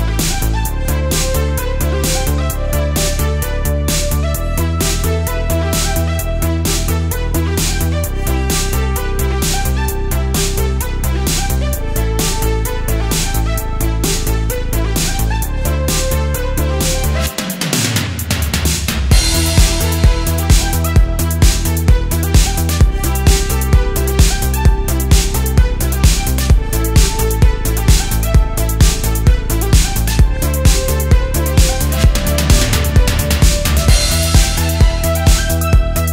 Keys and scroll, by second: 0.8 super+z, 5.4 space, 5.9 super+space, 6.0 super+space, 6.4 super+z, 6.8 super+z, 8.1 super+z, 14.0 space, 14.2 space, 15.4 space, 16.0 space, 16.6 alt+super+space, 17.4 space, 18.7 space, 25.6 space, 26.0 space, 26.4 space, 30.1 space, 31.4 space, 31.8 space, 33.1 super+z, 33.5 space, 35.7 space.